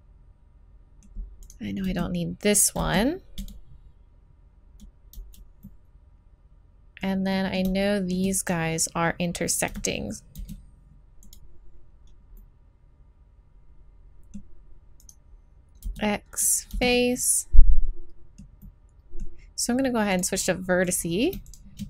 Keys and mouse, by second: 1.8 z, 2.8 x, 3.0 click, 5.1 z, 5.6 click, 8.4 right click, 9.5 right click, 9.7 z, 10.4 x, 12.4 middle click, 15.0-16.4 right drag, 15.8 x, 16.7 z, 20.8-21.8 right drag.